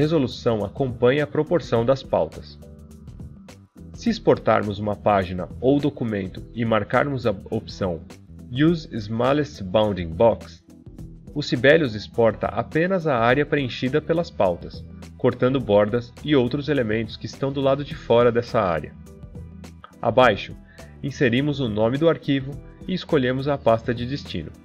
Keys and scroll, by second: 24.4 BackSpace.